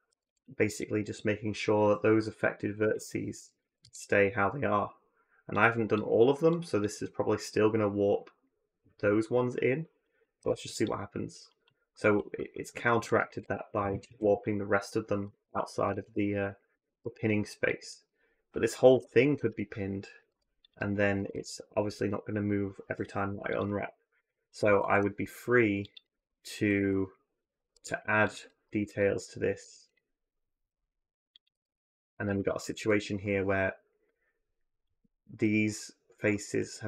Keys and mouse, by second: 0.1 a, 0.2 click, 0.8 drag, 2.6 p, 3.5 a, 3.6 a, 5.4 click, 6.3-9.8 drag, 10.2 u, 11.4 click, 11.9 click, 13.1 a, 13.2 a, 15.2 ctrl+z, 15.8 ctrl+z, 16.7 ctrl+z, 18.8 p, 20.1 u, 21.0 a, 21.1 a, 23.1 u, 24.6 ctrl+r, 25.9 a, 26.0 a, 26.6 3, 27.4 ctrl+r, 28.5 2, 29.4 3, 30.5 e, 31.3 a, 31.5 a, 32.1 3, 35.3-36.8 middle drag.